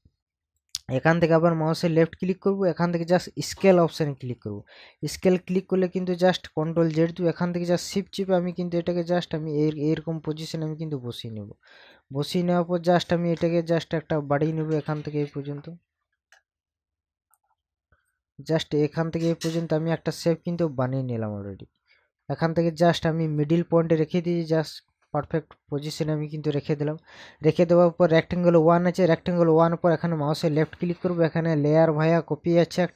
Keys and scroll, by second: 6.7 ctrl+z.